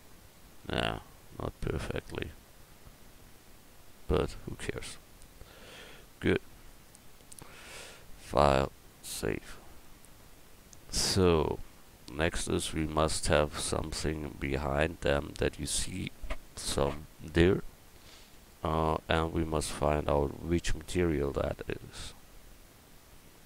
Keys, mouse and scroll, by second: 4.1-5.3 middle drag, 5.4 middle click.